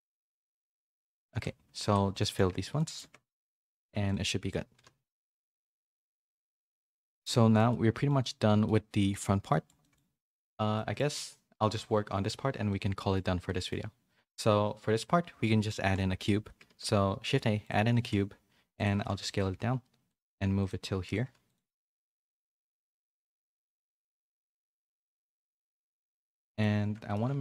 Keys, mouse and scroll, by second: 0.6 2, 1.4 alt+click, 2.2 middle click, 2.4 f, 2.7 middle click, 3.3 Tab, 3.3 middle click, 4.0 click, 4.7 /, 5.4 a, 5.6 a, 6.0 middle click, 6.7 middle click, 7.2 shift+middle click, 7.7 middle click, 8.2 middle click, 9.5 shift+middle click, 10.7 middle click, 12.7 shift+middle click, 12.9 middle click, 13.4 middle click, 15.8 KP_3, 16.6 shift+a, 17.9 s, 18.9-21.2 typing, 21.7 middle click, 22.3 g, 26.6 middle click.